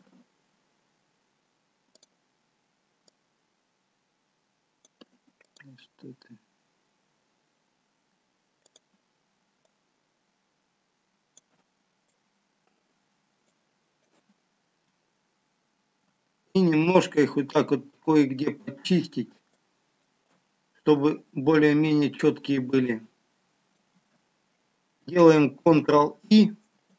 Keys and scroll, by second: 26.0 ctrl+i.